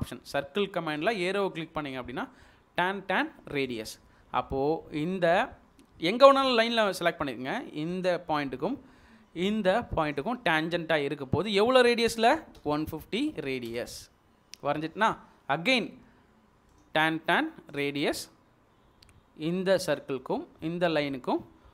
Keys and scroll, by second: 12.6-13.2 typing.